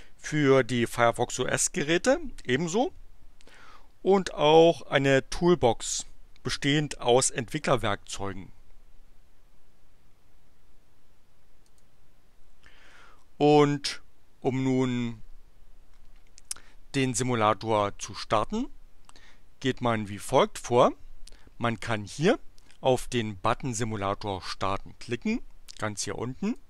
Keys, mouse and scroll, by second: 11.4 click, 20.0 click, 26.4 click.